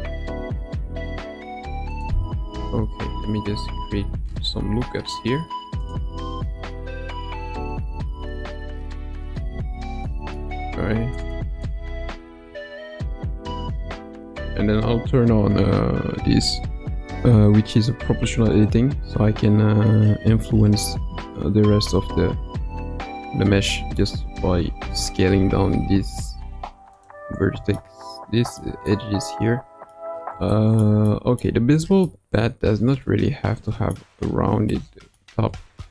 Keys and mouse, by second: 3.0 ctrl+r, 10.0 shift+middle click, 11.1 click, 11.3 click, 12.4 s, 14.8 o, 19.0 s, 27.7 shift+middle click, 28.9-29.9 middle drag, 30.5 shift+middle click, 31.0 middle click, 31.5 Tab, 32.0 middle drag, 32.3 right drag, 32.4-34.0 middle drag, 34.7-35.2 middle drag, 35.4 Tab.